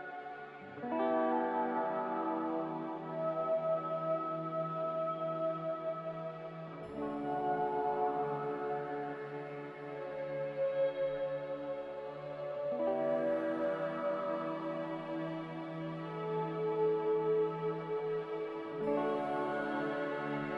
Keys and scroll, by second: 6.8 z, 7.6 a, 12.9 typing, 19.6 b.